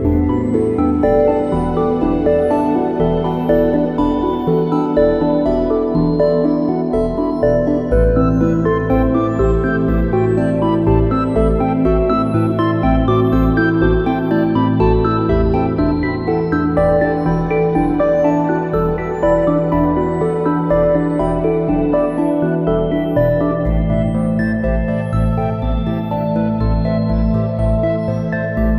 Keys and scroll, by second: 1.1 a, 16.7 space, 18.9 `, 19.1 space, 20.8 space, 25.2 space.